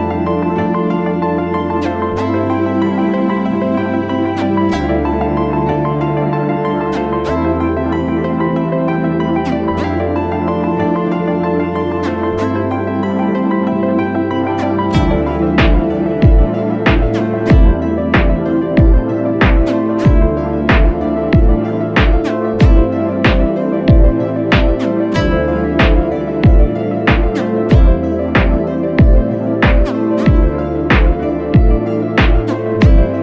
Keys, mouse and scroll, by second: 11.7-14.2 scroll up 1, 25.8 double click, 28.7 double click.